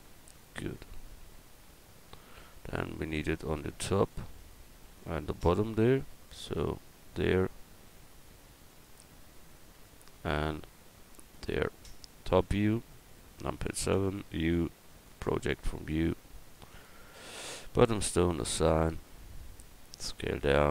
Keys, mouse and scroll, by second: 5.2 Tab, 8.7-10.0 right drag, 10.4-12.4 right drag, 12.4 KP_7, 13.9 u, 16.7-19.4 drag, 20.0 s.